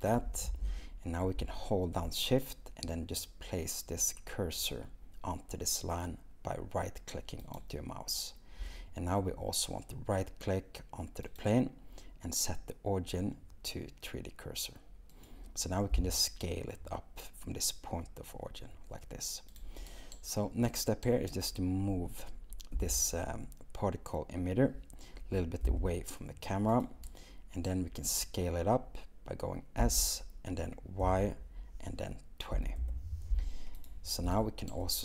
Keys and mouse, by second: 7.4 shift+click, 11.4-15.6 drag, 15.9 s, 22.8 g, 25.7 x, 29.8 s, 31.0 y, 32.6 2, 32.8 0.